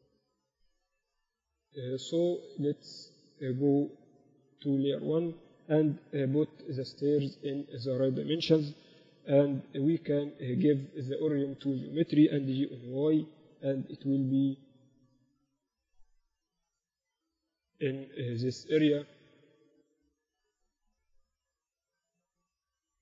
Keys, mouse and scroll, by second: 5.0-6.1 drag, 6.1 KP_7, 6.9 z, 11.2-13.4 ctrl+alt+shift+middle drag, 12.8 g, 19.0 click, 20.1-22.4 drag.